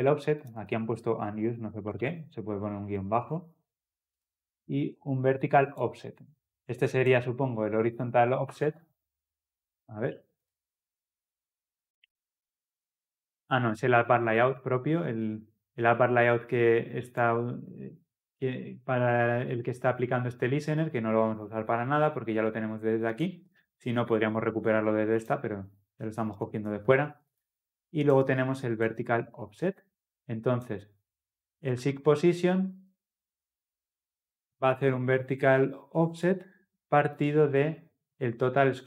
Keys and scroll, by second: 10.5 ctrl+b, 14.4 ctrl+alt+Left.